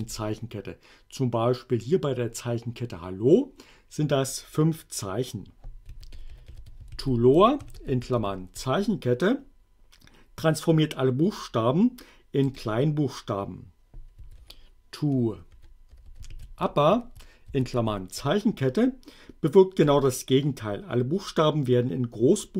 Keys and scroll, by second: 0.0 Return, 5.6-8.3 typing, 12.5 Return, 14.1-17.9 typing, 19.8 Return.